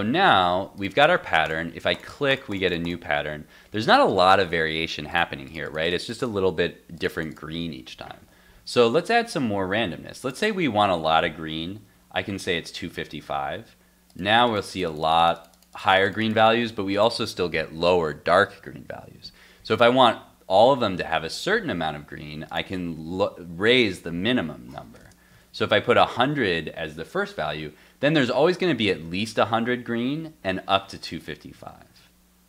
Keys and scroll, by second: 8.2 super+Tab, 12.4 super+s, 12.9 super+Tab, 13.3 super+r, 21.3 super+Tab, 25.3 super+s, 29.5 super+s, 31.3 super+s, 31.6 super+Tab, 32.0 super+r.